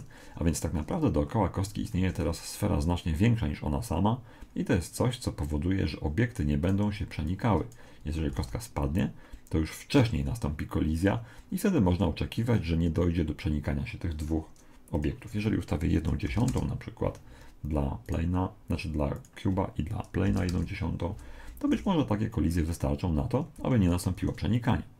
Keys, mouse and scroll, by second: 2.0 Escape, 6.7 right click, 7.3 click, 8.4 alt+a, 10.0 Escape, 14.9 click, 18.1 right click, 19.1 click, 21.7 alt+a, 23.6 Escape.